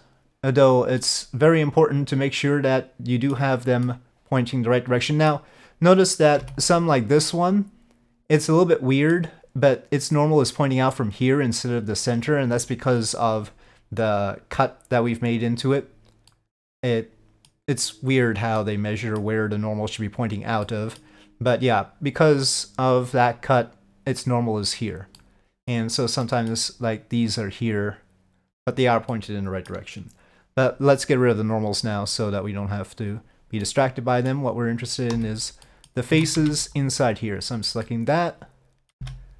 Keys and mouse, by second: 1.1-3.4 middle drag, 3.9-5.4 middle drag, 6.7 click, 8.5 middle click, 15.5 click, 16.4-17.6 middle drag, 18.7 middle click, 20.7 middle click, 22.5 click, 25.2 middle click, 26.3 middle click, 29.2 middle click, 31.8-33.5 drag, 33.7 middle click, 35.7 middle click, 36.2 alt+a, 36.5 c, 37.9-39.0 middle drag, 39.1 c.